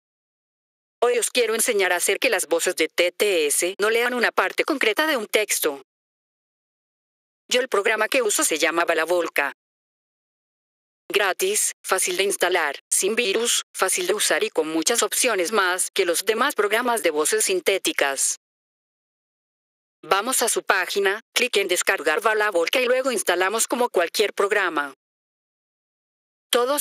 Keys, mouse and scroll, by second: 4.0 click, 6.4 click, 17.4-18.5 drag, 25.3 click, 26.5 click.